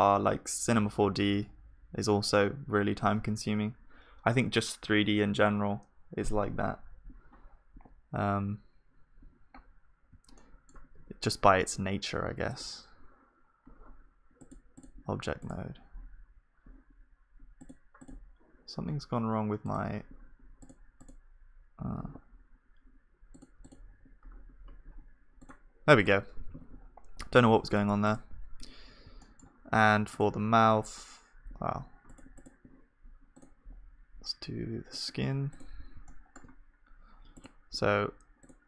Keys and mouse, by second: 11.0 Tab, 12.6-23.2 drag, 12.6-23.2 right drag, 26.4-30.1 drag, 26.4-29.2 middle drag, 26.4-30.1 right drag, 26.4 ctrl+s, 30.1-36.1 middle drag.